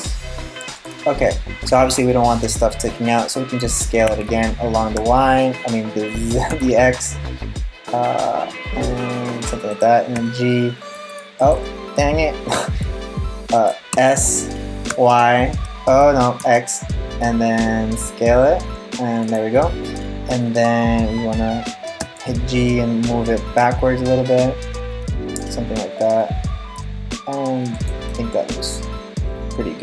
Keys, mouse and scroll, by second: 0.7 scroll down 3, 1.0-2.1 scroll up 5, 2.1 middle click, 2.1-2.7 scroll up 3, 3.7 s, 9.8 g, 12.1 g, 13.6 s, 21.6 g, 27.7 middle click.